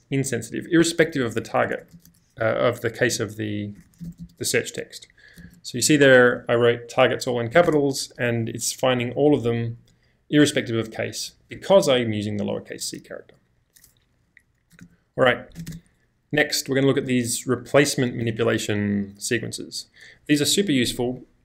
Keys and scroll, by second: 0.9-1.6 typing, 3.1-5.4 typing, 7.7 Return, 8.3-10.9 typing, 14.8 space, 15.6 space, 15.6 n, 15.7 space, 17.7 j, 18.3 k.